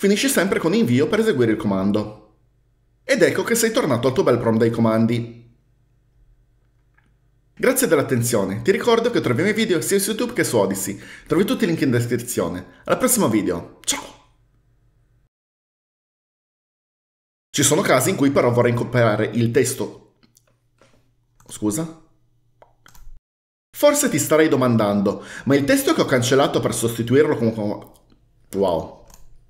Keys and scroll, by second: 0.8 Return.